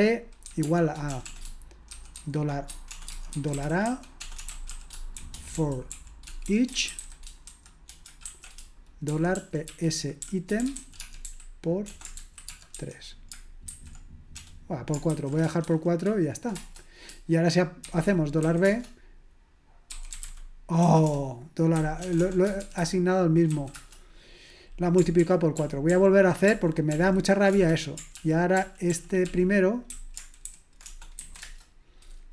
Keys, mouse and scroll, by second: 0.4-16.6 typing, 17.9-22.6 typing, 23.7 Return, 23.7 typing, 25.2 ctrl+p, 25.6 ctrl+p, 25.9 ctrl+p, 26.5 ctrl+p, 27.5 Return, 28.2 ctrl+p, 28.5 ctrl+p, 28.9 ctrl+p, 29.3 ctrl+p, 29.9 ctrl+a, 30.5 alt+f, 30.8 BackSpace, 31.2 b, 31.4 Return.